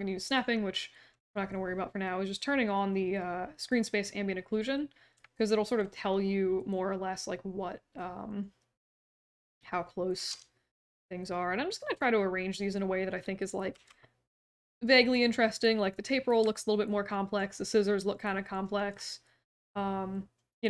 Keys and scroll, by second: 10.2 e, 13.7 w.